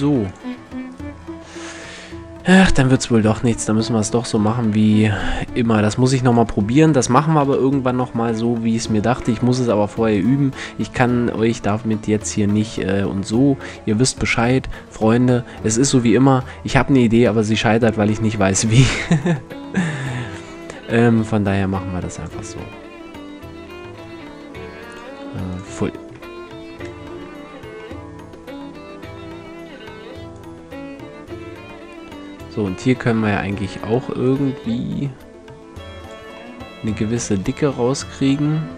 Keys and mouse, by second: 4.3-6.1 middle drag, 7.0 KP_1, 7.6 middle click, 8.6-9.7 drag, 8.8 a, 15.5-17.4 drag, 17.4-19.7 middle drag, 26.7 KP_Decimal, 31.7-33.9 middle drag, 33.9 click, 35.9 middle click, 36.1 click, 36.2 middle click, 36.3-37.0 drag, 37.0 middle click, 37.2 click.